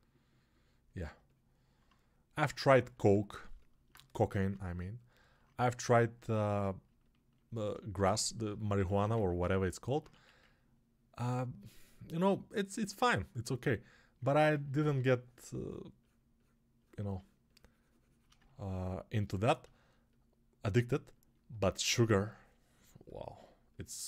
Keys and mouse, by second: 3.5-14.6 alt+shift+drag, 8.7 1, 14.6-18.1 alt+right drag, 14.9 2, 18.1-19.8 ctrl+alt+drag, 19.8-24.0 alt+right drag.